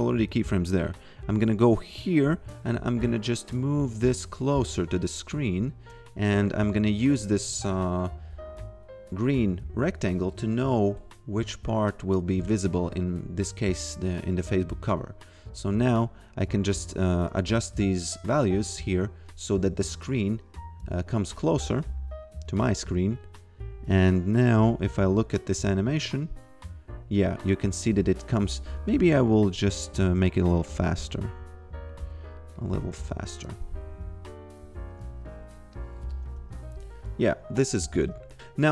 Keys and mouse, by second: 1.0 click, 3.4 click, 4.9 shift+click, 11.5 click, 13.9 click, 15.8 click, 21.3 e, 21.6 click, 24.0 click, 24.8 f, 27.1 f, 27.9 click, 32.6 click, 33.1 f, 35.7 click, 36.2 f, 37.9 f, 38.3 click.